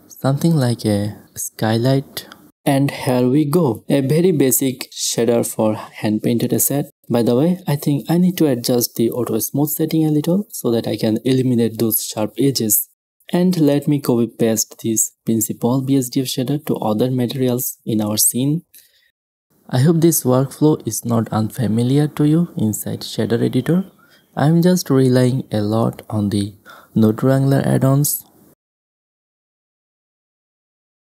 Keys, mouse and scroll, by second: 0.0 click, 0.3-0.8 drag, 0.9-2.5 middle drag, 1.2 shift+space, 2.5 click, 2.7 middle drag, 2.8 right click, 3.9 w, 5.4-7.2 drag, 10.4 middle click, 10.9 w, 11.2 w, 11.3-12.9 middle drag, 11.7 click, 13.0 /, 13.4-13.7 middle drag, 13.7 shift+z, 13.9 shift+z, 14.1 middle click, 14.1 shift+space, 14.2-14.9 middle drag, 15.1-17.2 drag, 17.2-18.8 middle drag, 18.8-20.4 drag, 22.0 click, 22.1 middle click, 22.6 ctrl+c, 22.7 middle click, 23.0-24.2 drag, 23.0 right click, 23.2 ctrl+v, 24.1 middle click, 24.1 a, 24.2 middle click, 24.4 click, 24.5 ctrl+v, 25.3 a, 25.3 middle click, 25.6 KP_0, 25.9 click, 26.6 click, 26.8 middle click, 27.0 click, 27.0 KP_0, 27.2 middle click, 27.3 click, 28.7-29.8 middle drag, 29.7 KP_0, 29.8 shift+space, 30.0 middle click, 30.5 F12, 30.8 shift+space.